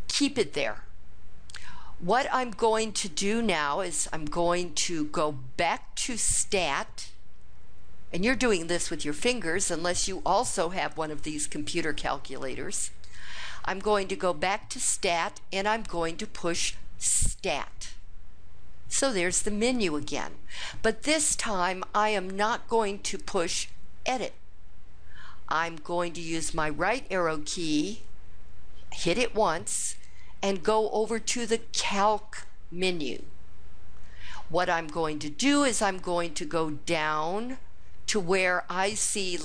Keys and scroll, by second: 28.8 Right.